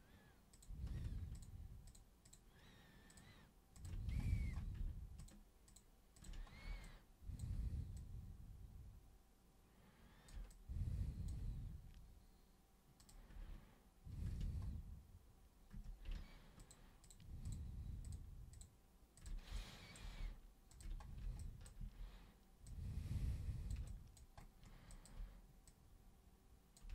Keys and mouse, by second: 0.5 super+click, 1.3 ctrl+shift+super+click, 1.8 ctrl+shift+super+click, 2.2 ctrl+shift+super+click, 3.1 ctrl+shift+super+click, 3.8 ctrl+shift+super+click, 5.2 ctrl+shift+super+click, 5.7 ctrl+shift+super+click, 6.2 ctrl+shift+super+click, 6.8-7.4 alt+super+drag, 8.0-10.3 super+drag, 10.5-11.3 alt+super+drag, 13.0 super+click, 15.7 super+q, 16.6 ctrl+shift+super+click, 17.0 ctrl+shift+super+click, 17.4 ctrl+shift+super+click, 18.0 ctrl+shift+super+click, 18.6 ctrl+shift+super+click, 19.1 ctrl+shift+super+click, 19.5 alt+super+click, 20.7 ctrl+shift+super+click, 21.4 alt+super+click, 21.8 super+w, 22.7-23.7 super+drag, 23.9 alt+super+click, 24.9 alt+super+click, 25.7 super+click.